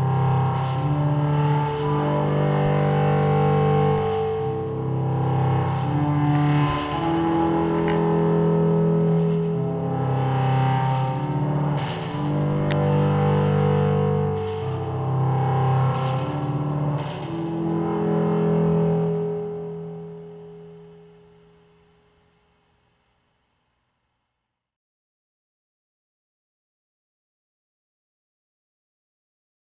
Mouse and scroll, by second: 12.4 click, 13.7 click, 20.4 click, 20.9 middle click, 21.4 middle click, 21.9 middle click, 23.0-24.6 drag, 26.1 click.